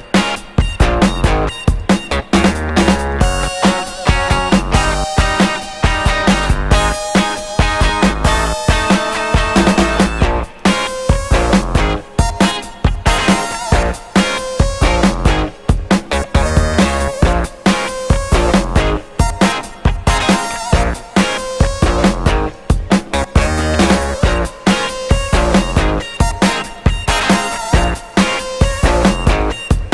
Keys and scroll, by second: 13.0 1, 13.2 5, 13.8 2.